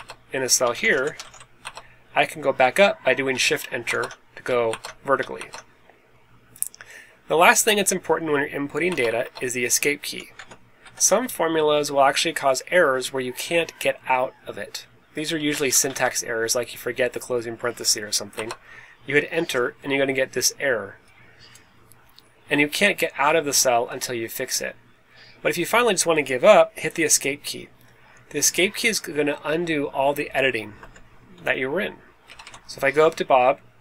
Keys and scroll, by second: 0.4-1.7 typing, 8.8 Return, 9.0 Return, 9.1 Return, 10.3 =, 10.8 1, 15.3-16.1 typing, 18.3 Return, 30.7 Escape, 32.2 Up, 32.4 Up.